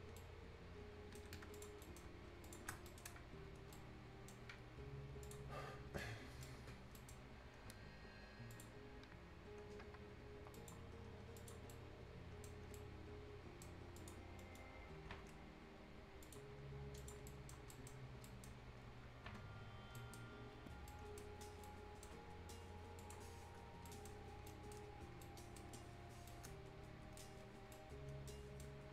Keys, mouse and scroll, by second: 0.2 shift+right click, 1.2 shift+Escape, 1.3 shift+scroll up 1, 1.6 shift+click, 1.8 shift+right click, 2.5 click, 2.7 shift+scroll down 1, 2.9 right click, 3.6 scroll up 1, 3.7-5.2 right drag, 5.2 click, 5.6 scroll up 1, 5.9 scroll down 1, 6.0 right click, 7.0 right click, 8.5 click, 11.0-11.4 scroll down 1, 11.4 click, 11.6 scroll up 1, 11.7 right click, 12.6 scroll up 1, 12.8 right click, 14.0 click, 14.3-16.2 scroll up 2, 14.4 middle click, 16.2 click, 16.8 scroll down 1, 17.0 click, 17.3 right click, 17.6 scroll down 1, 17.7 right click, 18.0 scroll up 1, 18.3 right click, 18.6 scroll up 1, 20.0 right click, 20.3 scroll down 1, 20.9 right click, 21.3 scroll up 1, 21.7-23.0 right drag, 23.0 click, 23.3 scroll down 1, 23.7 scroll up 1, 23.9 right click, 24.3 scroll up 1, 24.5 right click, 24.9 scroll down 1, 25.2 right click, 25.8 scroll up 1, 26.3 right click, 27.3-27.7 scroll down 1, 27.7-28.9 right drag.